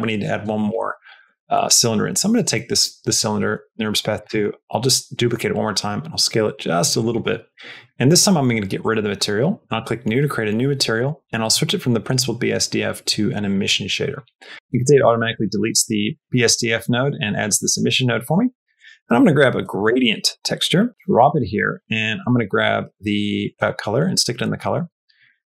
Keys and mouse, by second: 3.4 shift+d, 5.3 s, 8.7 click, 9.6 click, 10.9-13.4 drag, 14.5 middle click, 15.6 click, 16.3 click, 17.5 middle click, 18.1 middle click, 18.4 shift+a, 21.3 click, 23.3 click, 24.3 middle click, 24.8 middle click, 25.1 click.